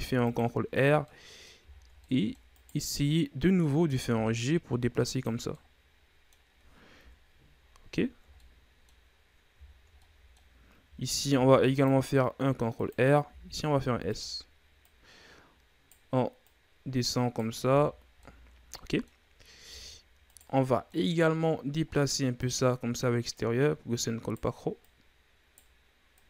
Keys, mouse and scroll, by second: 1.1 middle click, 1.7-2.0 shift+scroll down 4, 2.0 middle click, 2.5 right click, 3.6 middle click, 4.2 g, 5.5-7.0 middle drag, 7.0 KP_3, 8.0-8.3 ctrl+scroll up 1, 8.3 middle click, 9.2-9.6 scroll down 2, 9.6-10.0 shift+scroll up 3, 10.0-11.3 middle drag, 11.3 ctrl+r, 13.3 s, 14.8 right click, 16.4 right click, 17.6 Tab, 18.0 scroll down 2, 18.2-19.2 middle drag, 19.2-19.6 scroll up 2, 19.6 Tab, 20.2 right click, 20.6 middle click, 21.0-21.4 scroll up 1, 21.4 middle click, 22.4 click, 23.3 right click, 24.8 right click, 26.1 right click.